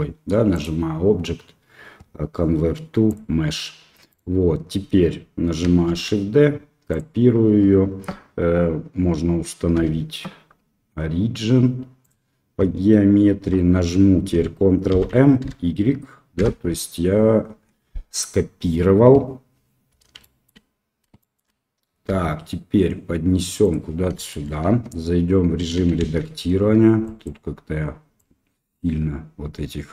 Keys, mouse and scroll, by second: 0.6-3.1 drag, 4.0 click, 5.8 shift+d, 9.7 w, 14.9 ctrl+m, 20.2 shift+middle click, 21.1 shift+click, 22.0 g, 24.2 shift+click, 24.6 Tab, 25.9 shift+z, 27.1 click, 28.1 click.